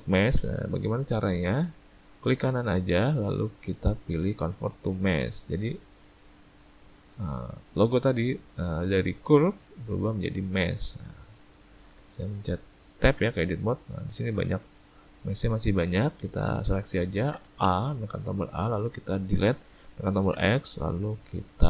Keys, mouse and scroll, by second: 0.4 Tab, 1.0 middle click, 2.5 right click, 10.5 ctrl+middle click, 10.9 middle click, 11.5 ctrl+middle click, 12.2 middle click, 12.6 middle click, 13.1 Tab, 13.6 middle click, 14.1 middle click, 14.5 shift+middle click, 15.7 middle click, 17.4 a.